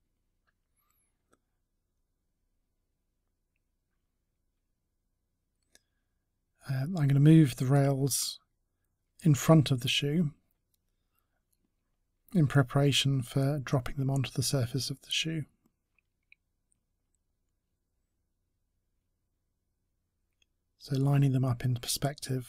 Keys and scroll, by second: 12.7 ctrl+z.